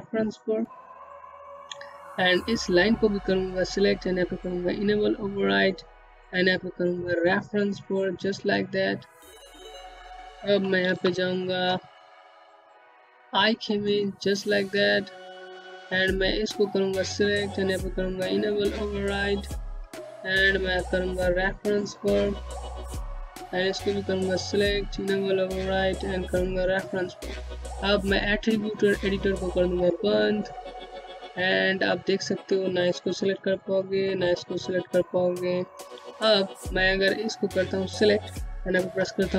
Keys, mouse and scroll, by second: 9.2-9.6 scroll up 1, 9.9 c, 11.2 click, 12.0 middle click, 14.0 click, 20.6 click, 29.0 click, 30.1 scroll down 1, 31.0 click, 35.0-35.7 scroll up 1, 35.7 click, 38.2 w, 39.2 click.